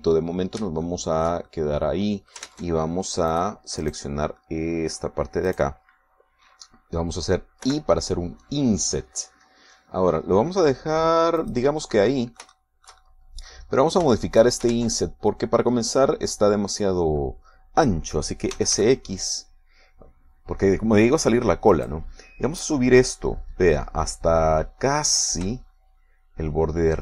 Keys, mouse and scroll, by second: 2.1 shift+middle click, 2.7-3.8 shift+middle drag, 3.7 ctrl+Tab, 4.5 click, 5.1 middle click, 5.7 click, 6.7 middle click, 8.9 i, 12.7 click, 12.9-14.9 middle drag, 15.3 shift+middle click, 16.0 ctrl+shift+Tab, 19.8 s, 20.0 x, 23.0 click, 24.3-27.0 drag.